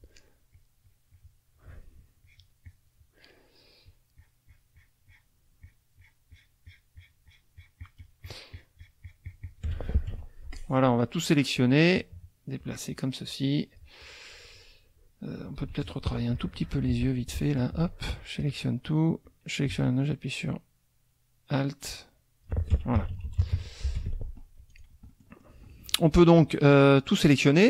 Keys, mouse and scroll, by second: 0.5 shift+click, 2.1 shift+click, 2.6 shift+click, 3.9-5.4 shift+drag, 5.6 shift+click, 6.0 shift+click, 10.1 shift+F1, 10.5 shift+click, 11.9-14.0 drag, 15.6 z, 15.7 click, 16.1 middle click, 16.6 F2, 17.0 click, 17.6 shift+click, 18.0 shift+click, 19.2-22.6 drag, 22.7 alt+F1, 22.9 alt+KP_Subtract, 24.0 alt+F1, 24.7 click, 25.1 click, 26.4-27.5 drag.